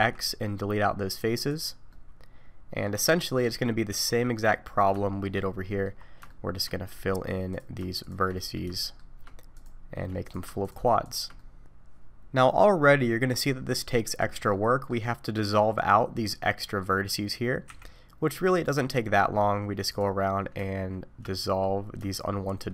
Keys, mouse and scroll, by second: 1.9 middle click, 3.0 middle click, 3.6 scroll up 1, 3.9 1, 4.2-5.0 scroll down 4, 5.0 shift+middle click, 5.7 middle click, 6.0 scroll up 2, 6.3 shift+middle click, 6.9-7.5 scroll up 1, 7.5 click, 8.0 shift+click, 8.3 middle click, 8.7 middle click, 9.5 click, 10.2 click, 10.6 shift+click, 11.2 click, 11.4 middle click, 14.5 middle click, 15.7 click, 16.3 middle click, 17.6 x, 18.9 middle click, 19.9 click, 21.3 middle click, 22.1 shift+click.